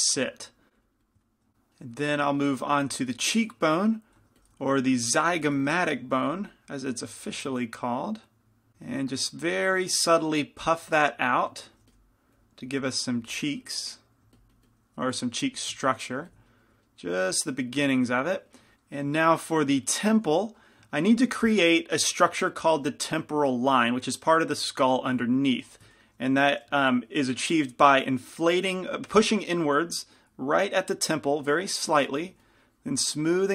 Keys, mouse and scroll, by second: 4.3 i, 4.3 f, 5.6 f, 6.4 f, 7.2-8.7 drag, 8.7 f, 9.2-10.4 drag, 12.0 f, 15.5-18.2 drag, 18.2-20.8 middle drag, 20.3 f, 25.0 f, 25.8 f, 28.0-33.5 drag.